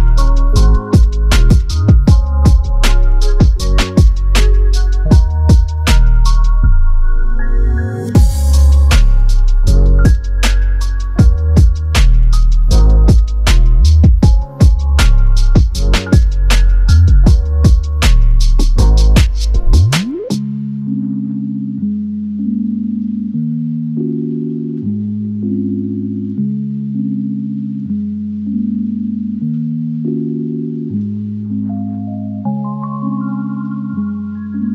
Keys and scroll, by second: 2.4 1, 4.5 1, 24.3 ctrl+KP_Subtract, 24.4 ctrl+KP_Subtract, 24.5 ctrl+KP_Subtract, 24.7 ctrl+KP_Subtract, 25.1 ctrl+KP_Add, 25.2 ctrl+KP_Add, 25.4 ctrl+KP_Add, 27.3 Up, 27.4 Up, 27.5 Up, 27.6 Up, 27.8 Up, 27.9 Up, 28.0 Up, 28.2 Up, 30.5 ctrl+KP_Subtract, 30.6 ctrl+KP_Subtract, 30.7 ctrl+KP_Subtract, 31.5 ctrl+KP_Add, 32.3 ctrl+KP_Add.